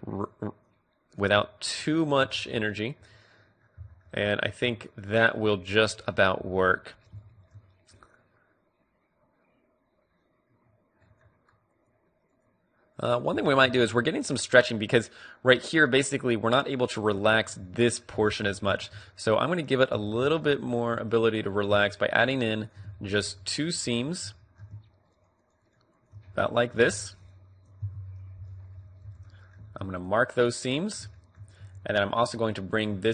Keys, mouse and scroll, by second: 1.9 middle click, 2.3 Tab, 2.5 middle click, 4.7 Tab, 5.4 middle click, 6.0 middle click, 6.2 middle click, 7.2-9.3 middle drag, 11.9-13.5 drag, 13.5 middle click, 14.8 middle click, 14.8-15.3 scroll up 1, 17.6-20.3 middle drag, 18.9 ctrl+Tab, 21.1 a, 21.6-23.1 right drag, 23.2 click, 23.6 middle click, 24.6-26.4 middle drag, 26.4 KP_3, 26.5-28.9 right drag, 28.0 KP_Decimal, 28.5 z, 29.2 z, 29.4 middle click, 29.9 ctrl+e, 31.2 middle click, 31.8 a, 32.8 click.